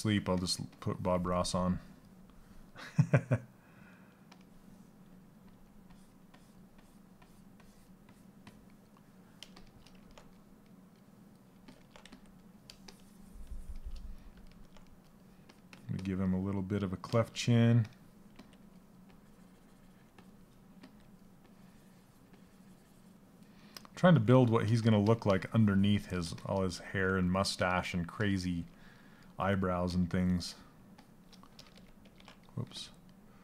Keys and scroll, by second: 17.9 s, 20.3 s, 31.6 ctrl+z.